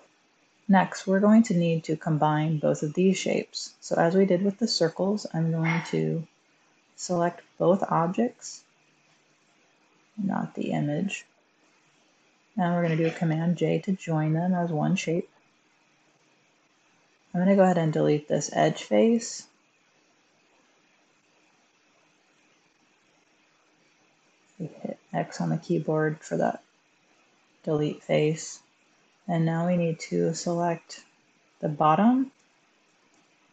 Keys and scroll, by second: 4.7 1, 5.9 Tab, 13.1 super+j, 19.0 Tab, 22.2 x.